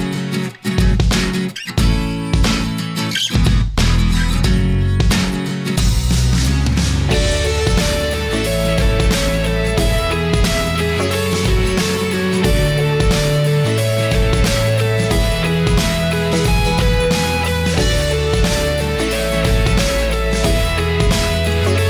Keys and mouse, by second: 1.7-4.3 drag, 5.3-8.5 drag, 8.9-10.0 middle drag, 11.1-12.6 shift+middle drag, 18.1 middle click, 19.2-21.3 drag.